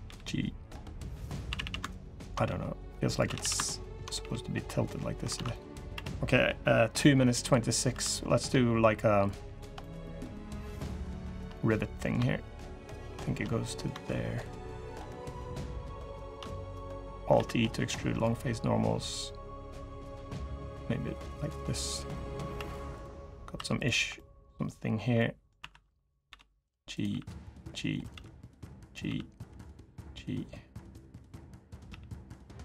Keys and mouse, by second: 1.2-3.9 typing, 5.1 alt+z, 5.3 click, 5.7 3, 6.8 click, 7.7 3, 9.5 click, 11.3 click, 13.2 click, 16.5-16.9 drag, 17.1 alt+e, 21.9-22.2 drag, 22.3 3, 23.3 2, 23.9 click, 24.9 click, 26.0 1, 26.0 g, 26.8 g, 27.9 g, 28.8 g, 29.6 click, 31.3 click, 31.6 g, 32.2-32.6 drag.